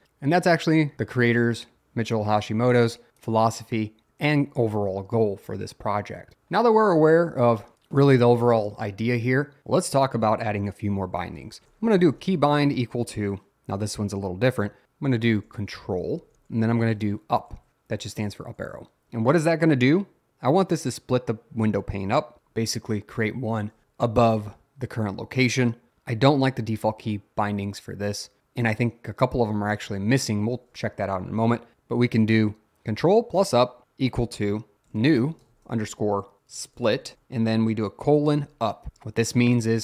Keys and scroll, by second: 4.3 o, 11.3 Return, 11.4-12.9 typing, 15.3-18.9 typing, 34.7-38.9 typing.